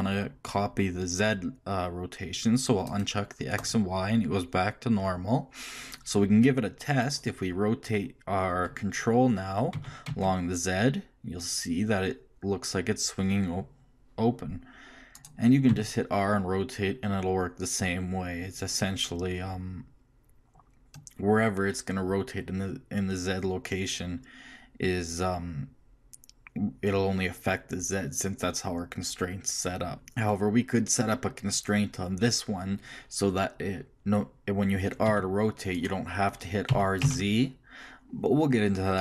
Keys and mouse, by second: 4.1-7.0 drag, 7.0-8.9 middle drag, 9.7 r, 15.7 r, 35.0 r, 36.7 r.